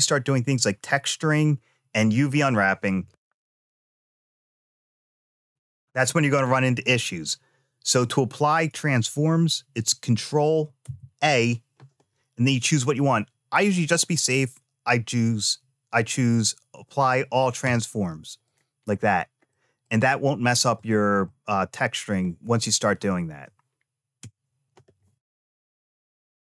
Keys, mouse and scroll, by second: 10.6 ctrl+a, 18.2 click, 18.7-19.3 scroll down 2, 19.3-20.5 middle drag, 20.5 click, 21.0-22.4 middle drag, 24.0 BackSpace, 25.0 click, 26.3 x.